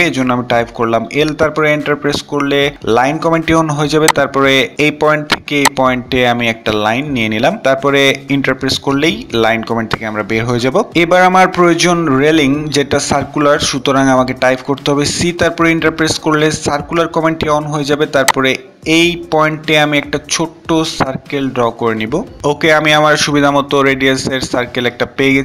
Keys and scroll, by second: 7.9 Return, 13.4 typing, 15.5 typing, 21.5-22.4 typing.